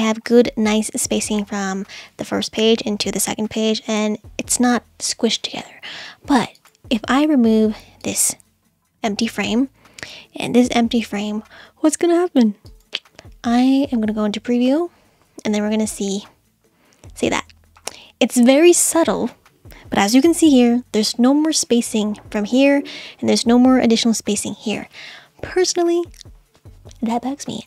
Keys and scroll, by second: 9.0 Delete, 9.2 BackSpace, 10.7 BackSpace.